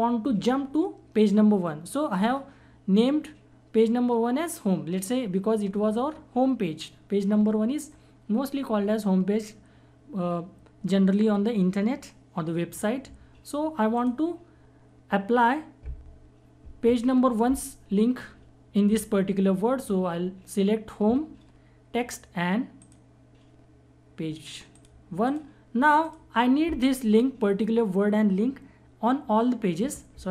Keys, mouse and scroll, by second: 13.9 click, 22.8 click.